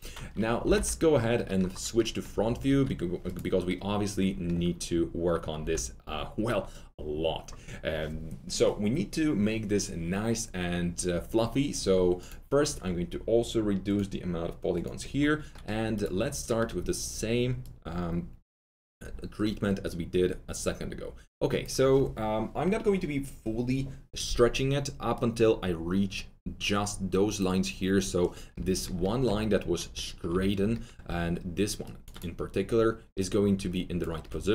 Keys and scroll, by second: 0.3-1.2 typing, 2.3 F3, 2.6 typing, 5.5 r, 31.0 alt+2.